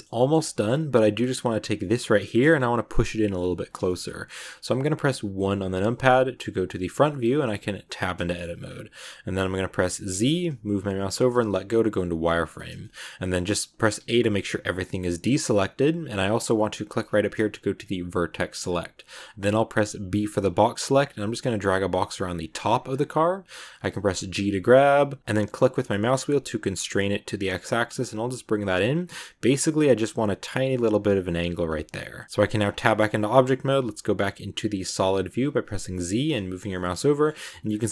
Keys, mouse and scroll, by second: 0.0-1.6 shift+scroll up 4, 0.1 shift+middle click, 0.4 middle click, 1.6 scroll up 1, 1.7-2.9 middle drag, 2.9 scroll down 1, 3.0-5.5 middle drag, 5.5 KP_1, 6.9 click, 7.3 Tab, 8.1 shift+middle click, 8.5 scroll up 2, 10.0 z, 12.7-13.9 shift+middle drag, 13.9 a, 17.6 click, 18.5 click, 20.0 b, 22.8 scroll up 2, 24.3 g, 32.4 Tab, 32.5-33.1 scroll down 5, 33.1 middle click, 33.5 z, 35.3 z, 36.4 scroll down 1, 36.6 middle click, 37.2-37.9 scroll up 4, 37.3 middle click.